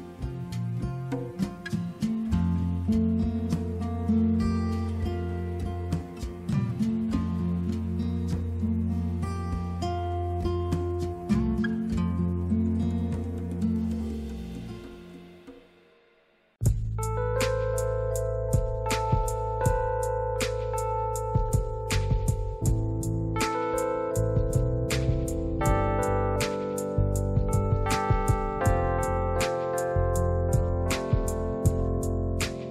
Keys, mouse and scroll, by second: 5.4-5.8 scroll down 1, 5.8 click, 7.0 click, 9.4 click, 23.0 click, 29.4 click, 30.7 click, 32.0 click.